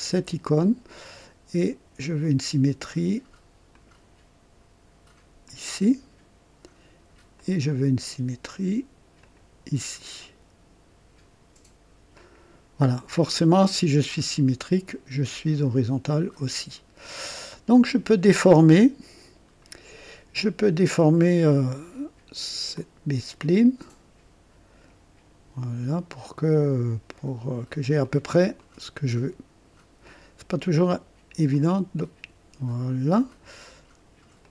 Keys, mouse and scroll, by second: 0.1 s, 2.2 click, 3.7 click, 5.4 click, 7.3 click, 9.2 click, 9.5 typing, 12.1 click, 12.7 typing, 13.2 right click, 14.9-17.7 drag, 18.7-19.5 right drag, 19.0 typing, 22.7-25.1 drag, 26.3 click, 28.0 click, 28.6 click, 31.5-33.1 drag, 34.4-34.5 drag.